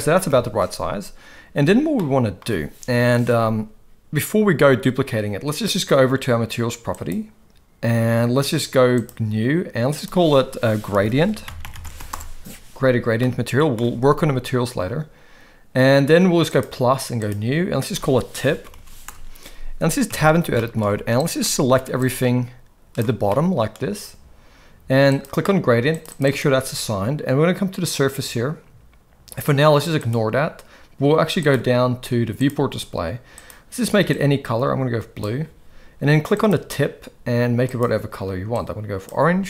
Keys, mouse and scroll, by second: 0.3 KP_1, 2.0-2.4 shift+middle drag, 2.9 KP_7, 7.0 click, 9.0-9.5 drag, 10.0-12.1 drag, 13.2-13.8 middle drag, 16.5 click, 17.8-19.1 drag, 20.1 Tab, 20.5 shift+middle click, 20.8 z, 21.4 middle click, 22.1 click, 23.3 middle click, 25.1-26.2 drag, 29.9 click, 31.4 click, 32.4 click, 33.3 click, 36.4 click.